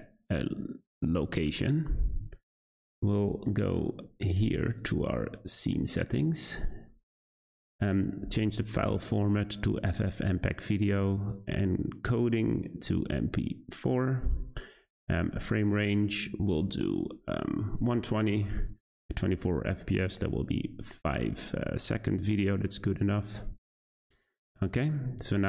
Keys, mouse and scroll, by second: 4.6 click, 5.5-8.5 scroll down 5, 8.5-10.2 drag, 10.2-11.2 scroll down 3, 11.2-20.8 drag, 22.1 click, 23.7 click, 24.4-25.4 scroll up 1.